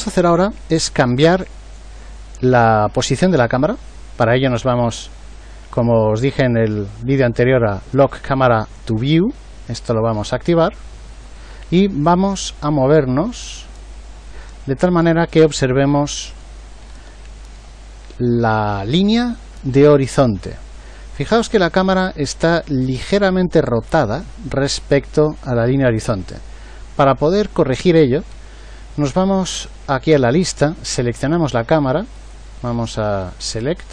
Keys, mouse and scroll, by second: 0.0 Escape.